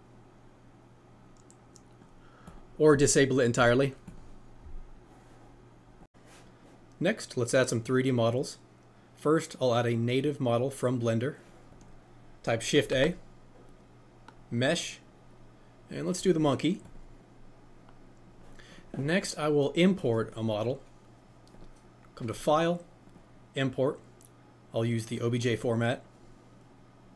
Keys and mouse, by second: 2.4 click, 4.1 click, 12.8 shift+a, 20.0-21.7 middle drag, 21.7-25.5 drag.